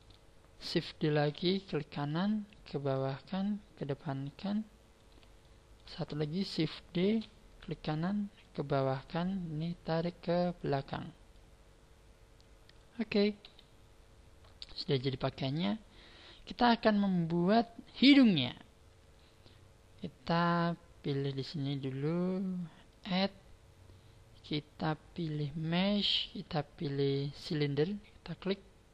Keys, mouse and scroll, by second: 1.1 shift+d, 1.6 right click, 2.4 click, 3.8 click, 5.4 shift+middle click, 7.0 shift+d, 7.6 right click, 8.4 click, 10.2 click, 11.3 click, 13.4 KP_1, 13.9-14.5 scroll down 2, 14.5 scroll down 4, 14.6-15.7 scroll up 4, 15.7-16.6 scroll down 2, 22.8 click.